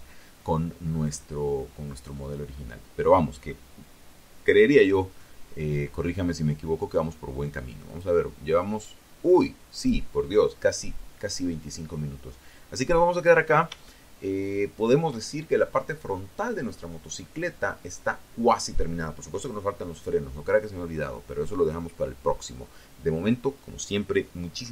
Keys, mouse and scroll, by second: 6.0 click, 7.9 click, 10.8-11.5 scroll down 2, 11.9-13.3 shift+drag.